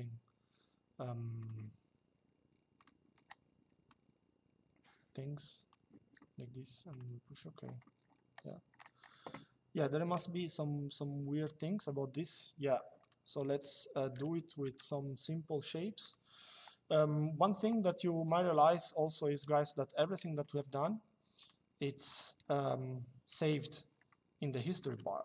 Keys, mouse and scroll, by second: 1.1 click, 2.5 click, 3.6 click, 6.6 click, 12.7 click, 14.4 Delete, 15.7 click, 18.0 click, 19.2 click, 21.1 click, 23.1 click, 23.8 typing.